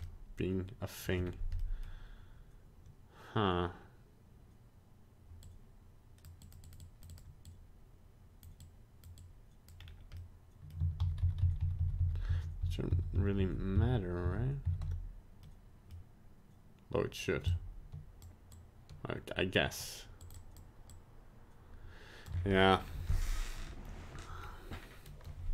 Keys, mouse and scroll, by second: 0.0 middle click, 1.0 middle click, 1.2 scroll up 1, 1.6 middle click, 5.4 click, 6.4 click, 6.6 click, 6.8 click, 7.1 click, 8.6 click, 9.2 click, 9.8 scroll down 2, 10.1 middle click, 11.1 ctrl+z, 11.3 ctrl+z, 11.5 ctrl+z, 11.7 ctrl+z, 11.9 ctrl+z, 12.1 ctrl+z, 12.4 ctrl+z, 12.7 ctrl+z, 13.0 ctrl+z, 13.2 ctrl+z, 13.5 ctrl+z, 13.8 ctrl+z, 14.3 ctrl+z, 14.7 ctrl+z, 15.4 middle click, 17.4 shift+click, 18.5 shift+click, 20.2 shift+click, 20.3 shift+click, 20.9 shift+click, 22.5 middle click, 22.8 scroll down 2, 23.2 middle click, 24.1 scroll down 1, 24.4 middle click.